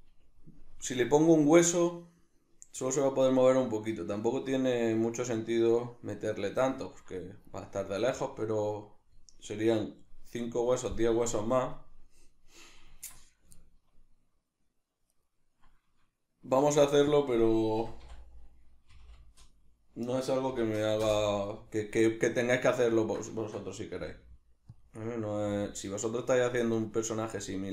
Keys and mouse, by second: 15.1 right click, 16.7 shift+d, 17.2 click, 17.8 r, 22.3 right click, 22.9-24.8 ctrl+middle drag, 23.9 g, 24.8 click, 25.3 g, 26.5 click, 26.8 right click, 27.3 g.